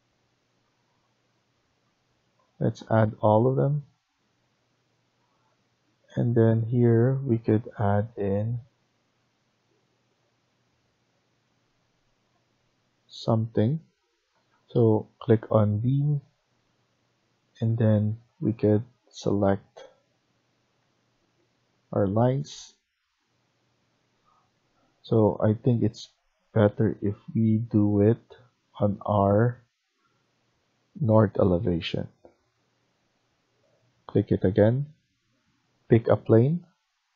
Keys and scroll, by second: 14.2 F1, 24.8 Escape.